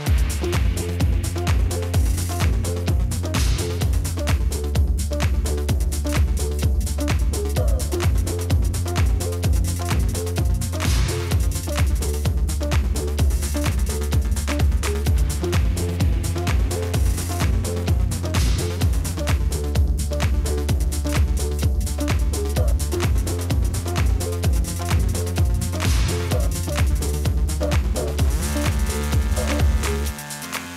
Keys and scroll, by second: 6.8 ctrl+g, 12.5-13.5 typing, 15.7 ctrl+v, 16.9-18.3 typing, 19.5 ctrl+c, 19.9 ctrl+v.